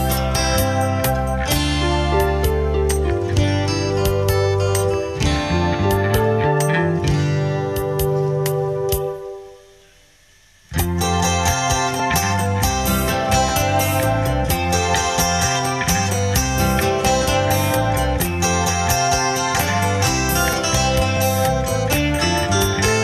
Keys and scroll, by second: 15.9 ctrl+d.